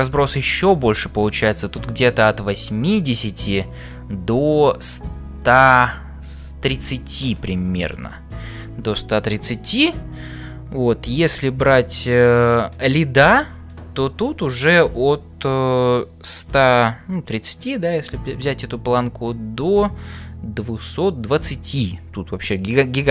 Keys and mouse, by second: 0.4 click.